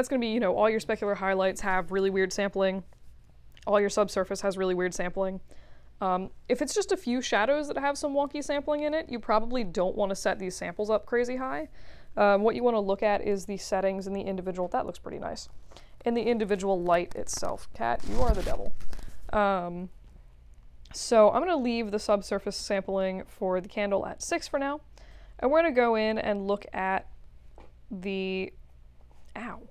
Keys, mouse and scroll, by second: 21.7 click, 25.1 click.